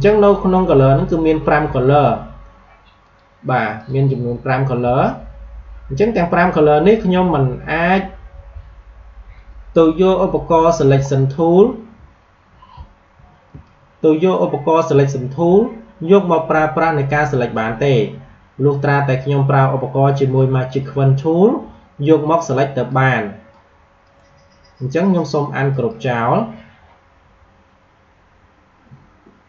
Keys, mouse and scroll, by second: 1.7 alt+scroll up 1, 2.9 click, 5.1-5.4 alt+scroll down 1, 6.0 alt+scroll up 1, 7.7 alt+scroll up 1, 10.8 alt+Num_Lock, 10.8 alt+scroll up 1, 11.0-11.4 alt+scroll down 2, 12.0-12.6 scroll up 2, 13.4 space, 13.5 click, 13.8 space, 22.8 click, 24.0 right click, 25.6 click.